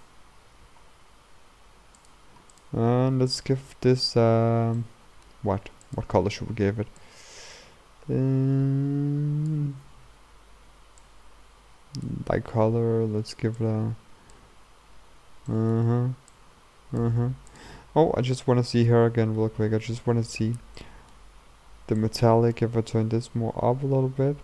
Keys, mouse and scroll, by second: 0.7-1.1 scroll down 2, 1.1 g, 2.6 click, 3.4-7.0 drag, 13.7-15.8 drag, 15.8 middle click, 16.5-17.6 drag, 17.9-18.4 scroll up 1, 18.4-20.2 middle drag, 20.2-20.8 scroll up 2, 20.8-22.2 middle drag, 22.2-24.4 drag.